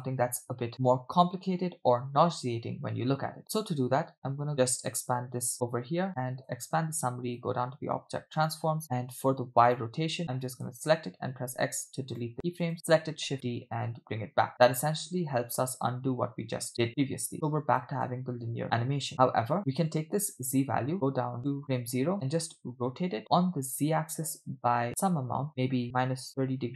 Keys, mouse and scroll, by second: 2.5 space, 4.9 click, 5.5 click, 6.4 click, 7.3 click, 8.4 click, 8.7-9.1 scroll down 2, 9.7 click, 10.2 click, 11.4 x, 12.6 click, 13.3 shift+d, 16.9-18.0 drag, 18.1 space, 19.6 space, 19.9 click, 20.9 click, 22.8 r.